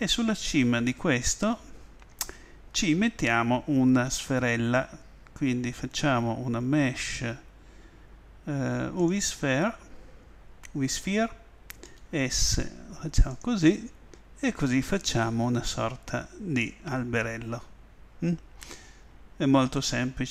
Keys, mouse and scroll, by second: 4.1 shift+a, 11.9 s, 13.4-16.8 drag.